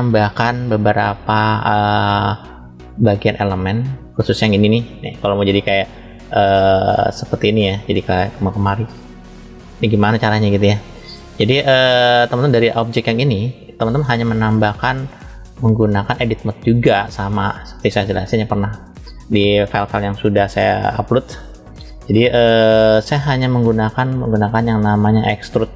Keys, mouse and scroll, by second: 0.6 click, 3.3-3.9 drag, 4.5 click, 6.1-7.6 drag, 8.2 click, 8.8 click, 11.5 click, 12.3 click, 13.7-14.8 middle drag, 15.7-17.2 drag, 18.3 click, 20.5 click, 23.1 middle click, 25.6 click.